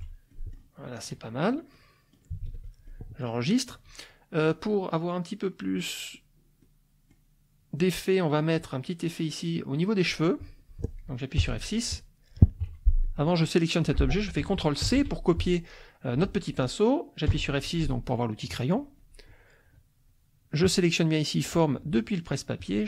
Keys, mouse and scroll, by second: 0.3 click, 0.9 click, 1.7 click, 2.4 ctrl+s, 2.8 ctrl+click, 6.6 click, 11.3 F6, 12.7 F1, 13.0 click, 13.6-16.7 drag, 14.9 ctrl+c, 17.3 F6, 20.7-22.0 drag, 22.6 click.